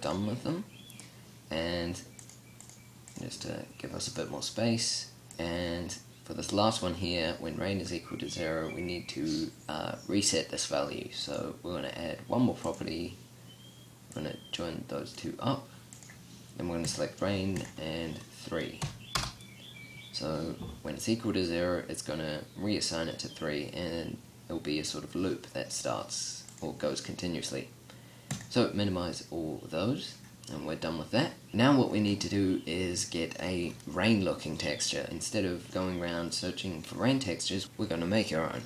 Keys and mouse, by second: 29.3-30.3 drag, 34.6 click.